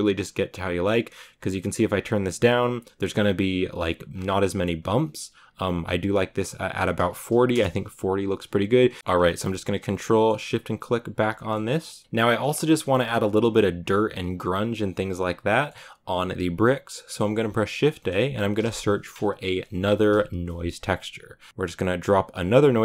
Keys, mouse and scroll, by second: 0.2-1.7 drag, 2.1 scroll up 4, 2.9 click, 3.9-5.5 scroll down 3, 5.5 click, 6.2-9.0 drag, 9.2 ctrl+shift+click, 9.8 click, 10.1 middle click, 10.4-11.2 scroll down 4, 10.7 click, 11.3 shift+middle click, 11.6 scroll up 2, 12.0-21.6 middle drag.